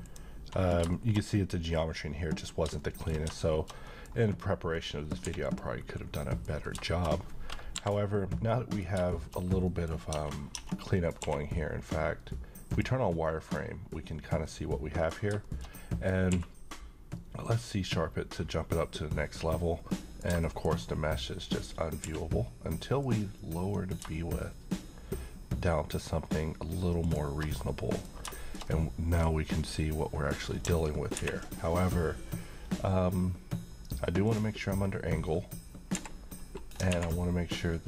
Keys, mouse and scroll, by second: 0.0 click, 0.9 shift+middle click, 5.3 h, 5.4 click, 6.2 middle click, 7.1-8.4 scroll up 1, 8.4-9.3 middle click, 9.9 scroll up 1, 10.1 Tab, 10.6-10.9 scroll down 1, 10.9 middle click, 11.2 q, 12.6 click, 13.3 middle click, 15.1 scroll down 1, 15.4-16.3 middle click, 16.3 q, 17.5 click, 19.9 middle click, 20.4 shift+middle click, 20.7-22.0 scroll up 1, 22.0 q, 23.0 click, 27.0 shift+click, 27.5-28.1 shift+middle click, 28.0 scroll up 1, 28.5-29.3 middle drag, 31.1 ctrl+`, 34.2 click.